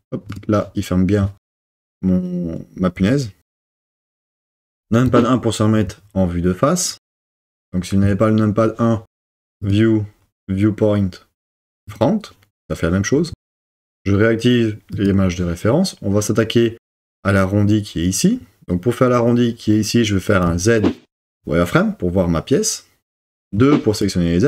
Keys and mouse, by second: 0.4 click, 5.1 KP_1, 9.8-12.0 drag, 14.9 click, 20.5 z, 23.5 2.